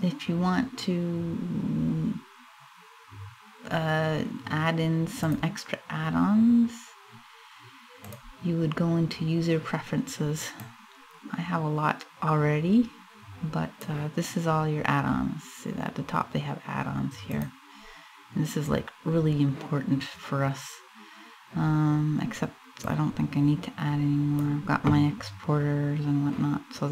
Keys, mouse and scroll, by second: 4.9 click.